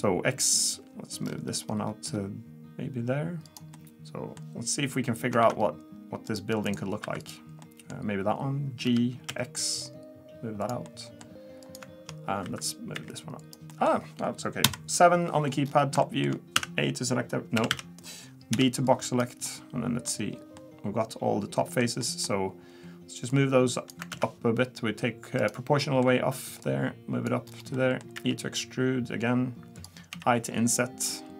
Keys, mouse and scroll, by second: 3.7 middle click, 5.4 ctrl+r, 7.0 2, 7.2 click, 7.6 middle click, 8.8 g, 10.8 middle click, 11.6 click, 12.4 3, 12.6 click, 12.9 e, 13.7 middle click, 14.6 KP_7, 15.7 scroll down 4, 16.0 shift+middle click, 16.6 a, 17.6 a, 17.7 a, 18.5 b, 19.5 middle click, 20.1-20.4 scroll up 5, 20.6 middle click, 22.0 middle click, 23.3 click, 24.1 ctrl+z, 25.4 click, 25.8 middle click, 26.6 click, 27.5-28.2 scroll down 3, 27.7 middle click, 28.2 e, 30.1 i.